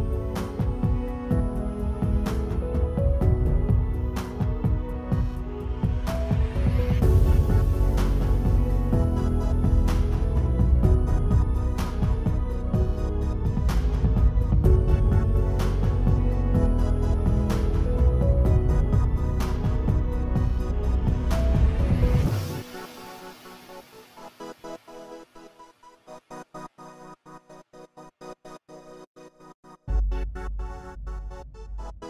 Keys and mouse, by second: 0.2 click, 0.3 click, 0.5 click, 1.4 click, 2.5 click, 3.3 alt+click, 4.5 alt+click, 4.9 click, 5.5 click, 6.3 alt+click, 6.7 click, 7.7 click, 8.0 0, 8.6 alt+click, 9.3 alt+click, 9.9 alt+click, 10.6 alt+click, 11.2 click, 11.6 Tab, 11.7 click, 12.6 click, 13.1 click, 13.4 shift+click, 14.1-14.5 right drag, 14.8 ctrl+z, 15.3 shift+d, 15.8 right click, 16.2-16.6 drag, 17.4-18.0 drag, 18.1 click, 18.5 alt+click, 18.8 click, 19.5 alt+click, 19.8 KP_Decimal, 20.1 alt+drag, 20.4 click, 20.6 click, 21.1-21.5 alt+drag, 21.6 alt+click, 22.0 click, 22.5 click, 22.8 click, 23.0 alt+click, 23.4 click, 23.7 ctrl+z, 24.3 click, 25.0-25.3 alt+drag, 25.4 r, 26.5 click, 26.9 r, 27.4 alt+click, 27.7 KP_Decimal, 27.9 click, 28.1 KP_Decimal, 28.3 alt+click, 28.7 r, 29.2 alt+click, 29.5 alt+click, 30.6 Tab, 30.8 click, 31.1 click, 32.0 Tab.